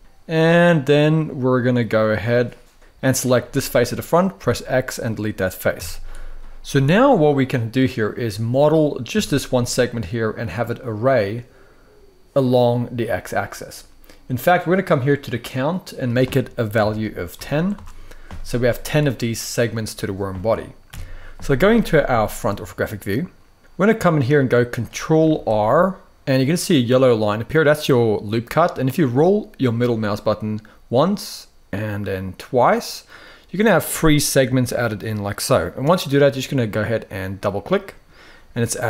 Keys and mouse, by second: 2.8 click, 3.1 middle drag, 4.0 x, 5.4 z, 6.4-7.7 middle drag, 8.8 a, 12.9 middle click, 15.4-17.5 drag, 18.8 middle click, 20.6 KP_1, 26.8 ctrl+r, 37.2-38.8 drag.